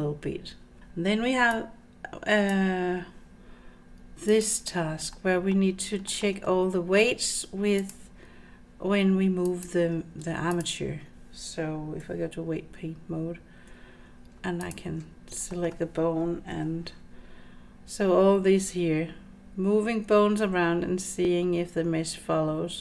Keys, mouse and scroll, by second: 0.8 middle click, 1.6-2.6 drag, 4.3 click, 5.2-5.6 middle drag, 6.1 shift+middle click, 6.5-7.0 middle drag, 7.8 click, 9.5 click, 10.6 shift+click, 12.1 Tab, 14.7 ctrl+click, 15.2 scroll down 2, 15.6 shift+middle click, 16.6 r.